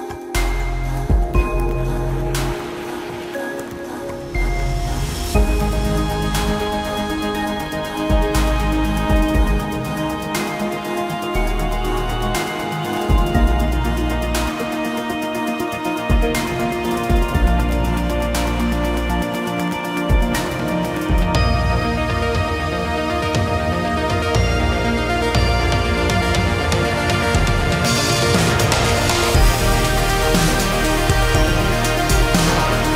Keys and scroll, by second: 0.5 space, 0.7 Escape, 6.4 shift+space, 8.1 s, 10.6 space, 20.3 space, 20.9 p, 23.4 space, 29.4 Delete, 31.0 shift+r, 31.5 space, 31.5 Escape.